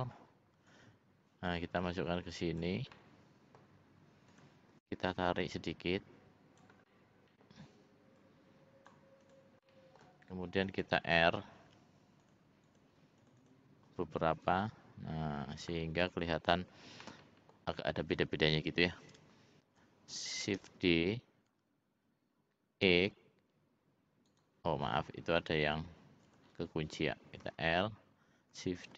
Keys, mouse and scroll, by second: 0.7-2.6 drag, 2.9 middle click, 4.3 click, 5.1-6.6 drag, 6.9 middle click, 8.2 click, 9.2 click, 9.6 middle click, 11.1 ctrl+r, 13.3 click, 14.4-15.7 drag, 16.1 click, 17.0 middle click, 19.3 l, 20.6 shift+d, 25.8 ctrl+z, 26.2 click, 27.4 l, 28.8 shift+d.